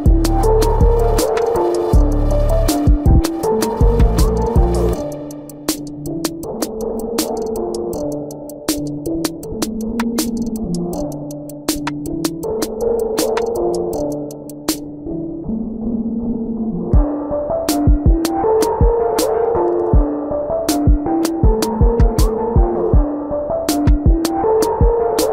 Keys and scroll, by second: 0.7 space, 2.8 space, 3.6 space, 4.2 space, 4.8 ctrl+alt+z, 5.3 ctrl+alt+z, 5.6 space, 6.1 space, 6.7 ctrl+alt+z, 7.2-8.7 typing, 11.8 space, 12.7 ], 13.0 ctrl+-, 13.3 space, 13.5 ctrl+-, 14.4 ctrl+-, 14.5-16.5 typing, 17.6 space, 18.2 space, 18.5 space, 19.8 ctrl+-, 20.4 ctrl+-, 20.9 space, 21.3 space, 22.2 ctrl+-, 22.5 ctrl+-, 22.8 space, 23.7 ].